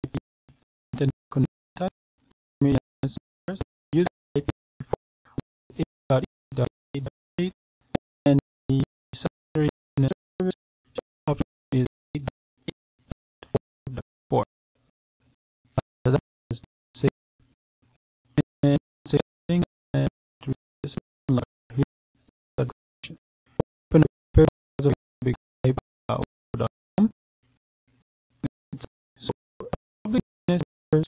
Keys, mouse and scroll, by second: 11.6-12.1 scroll down 2, 12.5-13.8 scroll up 4, 17.0-18.1 scroll up 2, 20.6 click, 23.1 click, 24.1 click, 27.6-28.5 scroll up 1, 28.5-31.0 scroll down 2.